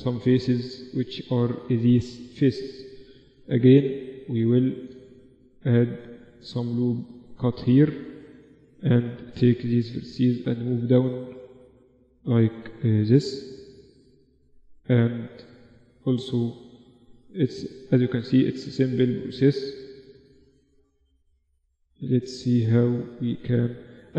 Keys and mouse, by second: 0.0 middle click, 2.7 middle click, 5.5 ctrl+r, 8.3 click, 8.7-12.0 middle drag, 11.2 g, 14.5 middle click, 14.9-16.6 right drag, 16.6 middle click, 17.3 right click, 17.7-21.6 middle drag, 22.9 Tab, 22.9 Tab.